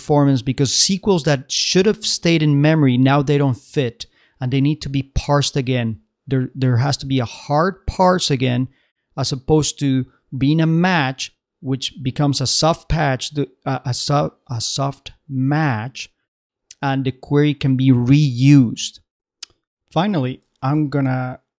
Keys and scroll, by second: 20.6 super+Tab.